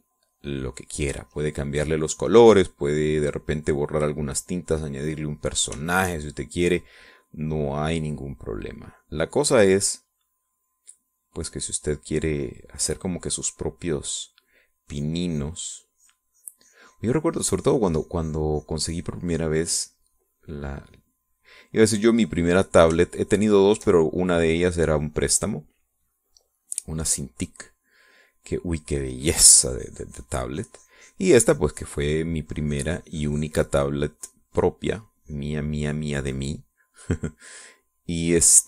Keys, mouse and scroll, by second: 0.4-2.1 drag, 2.1 middle click, 2.9-6.3 drag, 6.5 middle click, 6.6 click, 6.9 shift+click, 7.5-10.3 shift+drag, 11.4-15.4 drag, 15.6-18.2 drag, 18.4-22.7 drag, 22.9 click, 24.1-25.4 shift+drag, 25.8-31.5 drag, 31.6-38.6 drag.